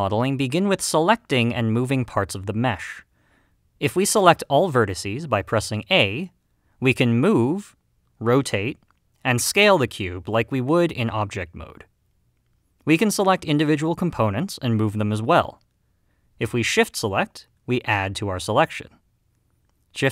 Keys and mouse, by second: 5.8 a, 7.6 g, 8.9 r, 10.3 s, 12.6 right click, 15.4 g, 17.0 right click.